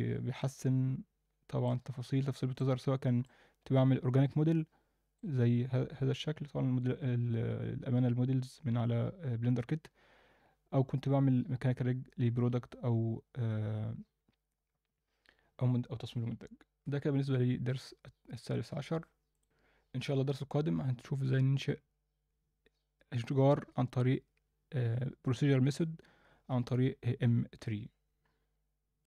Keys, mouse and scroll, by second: 0.7-1.6 alt+middle drag, 1.8-2.4 scroll up 2, 2.3 alt+middle drag, 2.7-3.1 scroll down 1, 3.2-5.2 alt+middle drag, 10.2-10.6 scroll down 1.